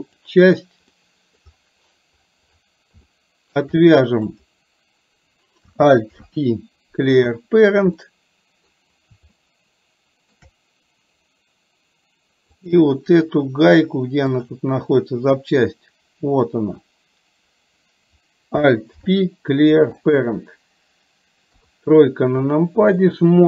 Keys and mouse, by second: 0.1 click, 1.0 middle click, 3.1 shift+middle click, 4.4 click, 6.1 alt+p, 8.1 middle click, 9.4 shift+middle click, 9.7 shift+click, 9.9 shift+middle click, 19.0 alt+p, 21.5 KP_3, 23.1 shift+middle click.